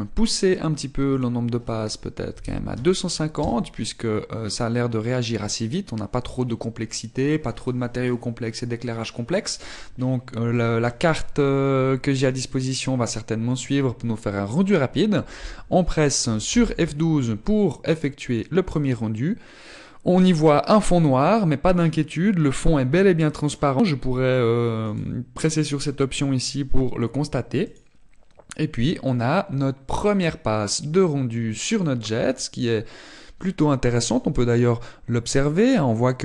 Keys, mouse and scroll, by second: 4.6 click, 4.6-5.2 scroll down 2.